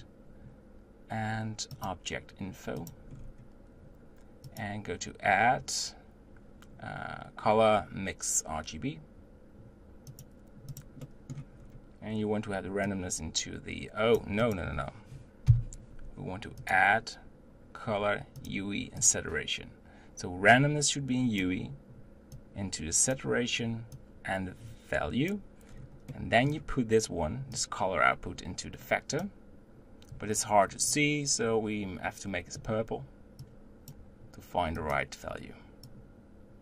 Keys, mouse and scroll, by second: 4.1-4.5 scroll up 5, 4.5-12.5 drag, 12.5-12.9 scroll up 2, 12.9-14.2 drag, 14.5 click, 15.5 Delete, 20.7-24.0 drag, 25.4 click, 25.8-26.5 scroll down 3, 27.6 click, 34.1 click, 35.4 click.